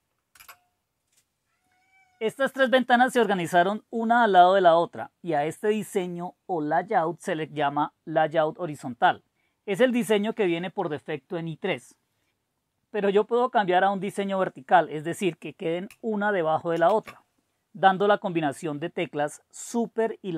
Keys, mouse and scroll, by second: 0.3 Return, 16.7 super+e.